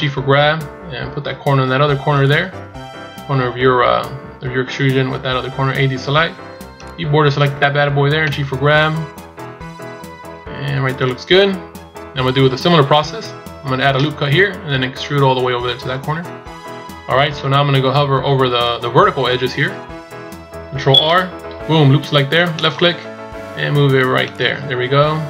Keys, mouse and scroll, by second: 2.7 scroll up 1, 5.7 a, 6.3 b, 8.2 g.